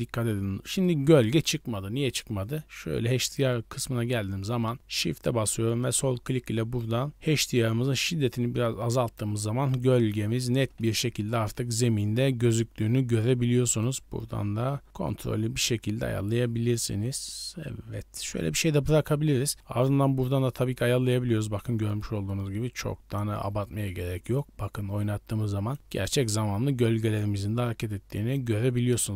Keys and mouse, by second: 3.2 right click, 9.6-10.4 middle drag, 13.7-14.9 drag, 14.9-18.2 shift+middle drag, 20.2 middle click, 20.3-23.1 drag, 24.4-25.2 drag, 25.2-25.8 right drag, 25.8 middle click, 27.0-28.2 right drag, 28.2 click.